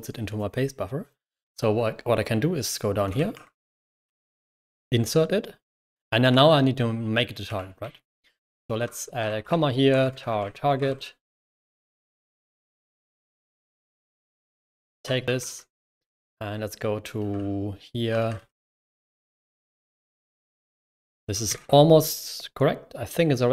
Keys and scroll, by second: 2.7-4.6 typing, 6.1-15.9 typing, 13.0 Return, 17.2-21.4 typing, 19.5 Escape.